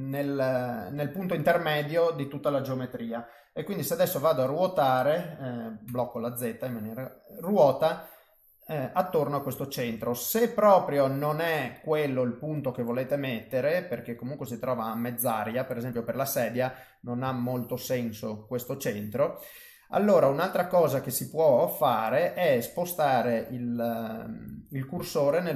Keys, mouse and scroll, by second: 0.5 click, 0.8 middle click, 3.1 middle click, 4.1 r, 8.2 middle click, 9.8 ctrl+z, 10.2 middle click, 11.4 middle click, 13.4 middle click, 15.1 middle click, 15.9 click, 16.4 middle click, 17.3 shift+middle click, 18.0 middle click, 19.1 middle click, 21.1 middle click, 24.1 middle click, 25.0 shift+middle click.